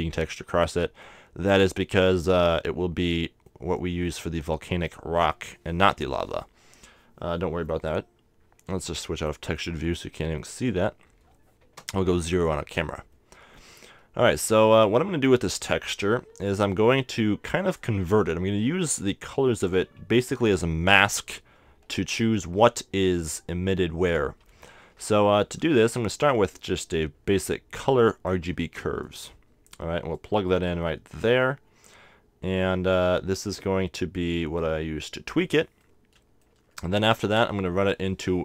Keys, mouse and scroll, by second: 1.0-8.4 middle drag, 9.2-11.0 drag, 10.4-11.7 middle drag, 11.7 KP_0, 11.9 middle click, 12.5-14.9 middle drag, 15.7-17.4 drag, 15.7-17.4 right drag, 17.5-19.2 drag, 19.7-21.4 drag, 22.3-24.2 middle drag, 24.8 shift+a, 31.2 click, 34.6-36.3 drag, 35.8-37.7 middle drag, 37.2 shift+a.